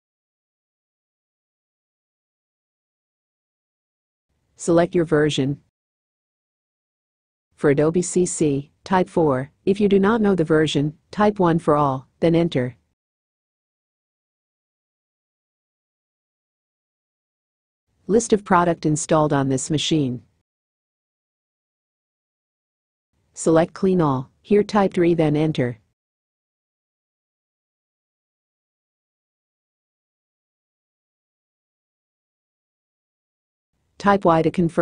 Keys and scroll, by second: 3.1 4, 19.2 3, 33.3 y.